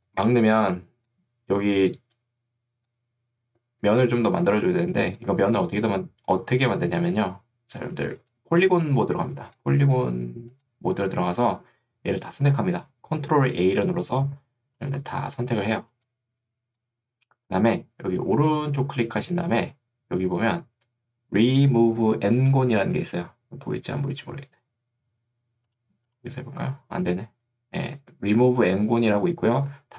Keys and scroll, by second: 0.5 ctrl+2, 5.7 Escape, 8.1 ctrl+2, 9.9 Escape, 15.9 3.